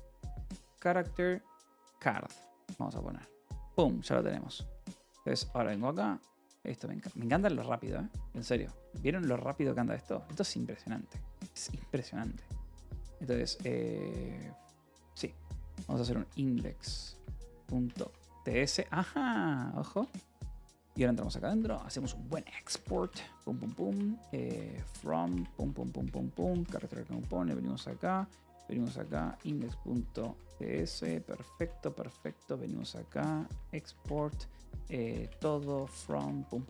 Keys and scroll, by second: 0.0-2.2 typing, 4.2-5.8 typing, 6.8 j, 7.2 d, 8.3-23.0 typing, 8.7 Return, 12.1 Escape, 13.0 Escape, 13.9 Escape, 14.6 Return, 19.0 Return, 19.8 Return, 20.6 Return, 24.1-25.4 typing, 25.9 Return, 26.2 Escape, 26.7-31.2 typing, 30.5 Escape, 30.8 Return, 32.0 Return, 32.3-36.3 typing.